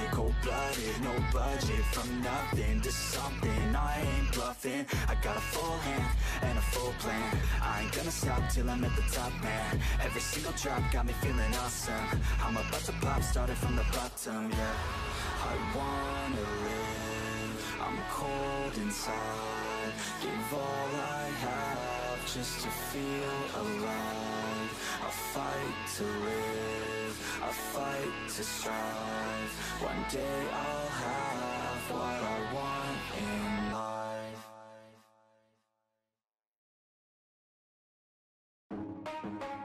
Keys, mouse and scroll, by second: 3.3 drag, 4.3 click, 4.9 KP_3, 5.7-6.4 drag, 7.0 click, 8.3 shift+middle click, 8.7-9.3 scroll up 3, 9.0 shift+middle click, 9.6-16.3 shift+middle drag, 16.3 click, 17.2-18.0 drag, 18.2-19.8 middle drag, 19.8 click, 20.1-20.4 middle drag, 23.0 drag, 23.9 click, 24.2 middle click, 24.5 KP_3, 25.8-28.7 drag, 31.5 click, 31.8-32.5 scroll up 4, 31.9 shift+middle click, 32.2 shift+middle click, 33.7 ctrl+click, 34.3 ctrl+z, 35.0 f, 35.7 ctrl+click, 36.3 ctrl+z, 36.7 click, 37.1 shift+middle click, 37.3-37.7 scroll up 1, 37.7 shift+middle click, 38.5 ctrl+click, 39.0 ctrl+z.